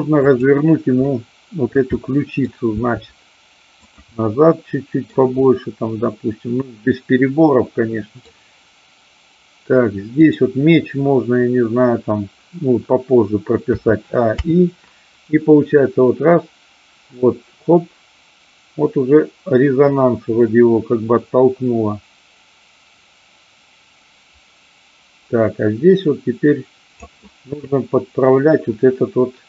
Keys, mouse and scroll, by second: 1.4 middle drag, 1.9-2.4 middle drag, 2.8 r, 3.9 click, 4.0-5.1 middle drag, 5.4-8.3 middle drag, 10.3-11.1 drag, 14.4 i, 15.8-27.0 drag.